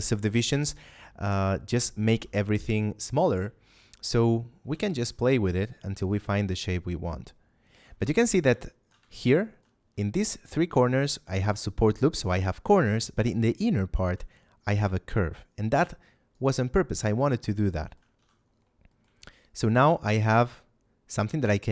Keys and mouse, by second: 2.0 a, 3.8 shift+middle click, 4.7 Tab, 5.0 shift+middle click, 8.6 shift+middle click, 8.9 Tab, 9.4 shift+middle click, 12.2 Tab, 12.8 shift+middle click, 16.3 click, 17.2 shift+middle click, 18.1 a, 18.8 middle click, 19.1 shift+middle click.